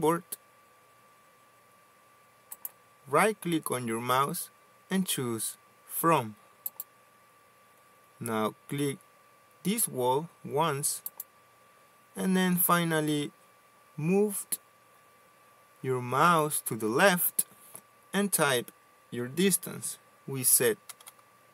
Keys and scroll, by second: 21.3-21.5 typing.